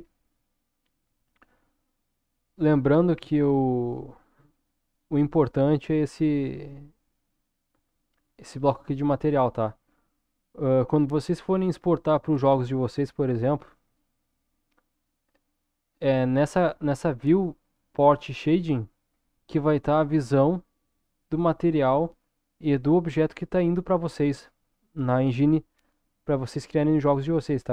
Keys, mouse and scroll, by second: 4.4-5.9 scroll up 3, 5.9 click, 6.8-8.0 middle drag, 12.5-13.9 shift+middle drag.